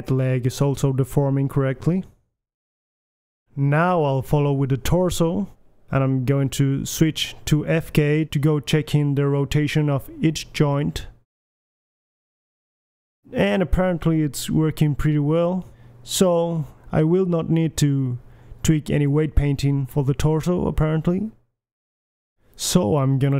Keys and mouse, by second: 0.2 middle drag, 0.6 middle click, 1.1 g, 1.5 drag, 1.7 g, 2.1 drag, 2.5 g, 2.8 click, 3.0-3.8 drag, 3.4 g, 4.2 click, 4.4 alt+g, 4.6 alt+s, 4.6 a, 4.7 KP_1, 5.0-6.1 middle drag, 6.2-6.6 drag, 6.6-9.4 middle drag, 9.4 click, 10.1-11.2 right drag, 10.4 r, 11.4-12.1 right drag, 11.5 KP_3, 11.8 r, 13.0-13.4 middle drag, 13.4-14.0 right drag, 13.8 r, 14.9 right click, 14.9 KP_1, 15.1 r, 15.9-16.6 right drag, 16.4 r, 17.5 KP_3, 17.8 r, 19.1 KP_1, 19.4-20.0 middle drag, 19.6 r, 21.1 KP_1, 22.4-22.9 middle drag.